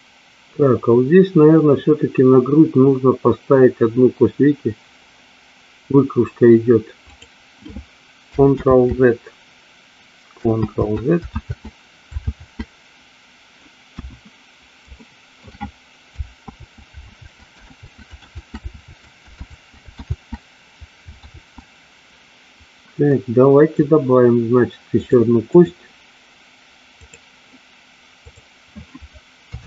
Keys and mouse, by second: 7.2 click, 8.8 ctrl+z, 11.6 ctrl+z, 12.6 ctrl+z, 14.0 KP_1, 15.1 shift+middle click, 16.7 ctrl+z, 17.3 ctrl+z, 18.0 ctrl+z, 18.5 ctrl+z, 19.6 ctrl+z, 20.2 ctrl+z, 21.4 ctrl+z, 23.2 middle click, 25.0 click, 29.5 KP_3.